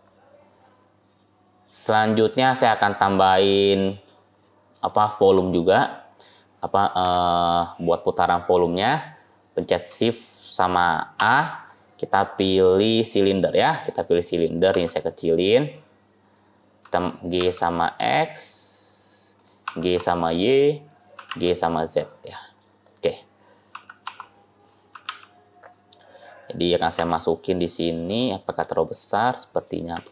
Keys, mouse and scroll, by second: 0.3 scroll down 1, 1.1 middle click, 1.1 scroll down 1, 1.9 scroll up 1, 2.0-2.7 scroll down 1, 2.7-3.2 scroll down 1, 3.2 middle click, 3.2 scroll down 1, 4.2-4.6 scroll up 3, 4.7 shift+middle click, 5.4 scroll up 1, 6.2-7.2 scroll up 2, 7.2-7.6 scroll down 2, 7.2-7.6 scroll up 1, 7.6-8.4 scroll down 9, 8.4 middle click, 8.9-9.2 scroll down 2, 11.1 shift+a, 14.6 s, 16.7 g, 19.6 g, 22.1 middle click, 22.6-23.6 scroll up 7, 23.6 g, 24.8 g, 25.8 middle click, 26.7 g, 28.1 middle click, 28.7-29.5 scroll down 3, 29.2 middle click, 29.8 s.